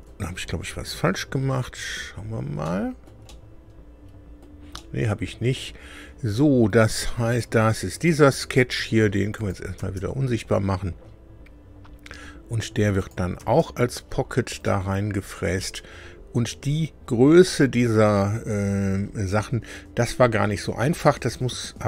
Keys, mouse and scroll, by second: 2.6-4.6 shift+middle drag, 4.7-5.7 middle drag, 7.4 click, 9.3 click, 9.8 space, 11.0 scroll up 2, 13.0 click, 13.4 space, 14.6-16.5 drag.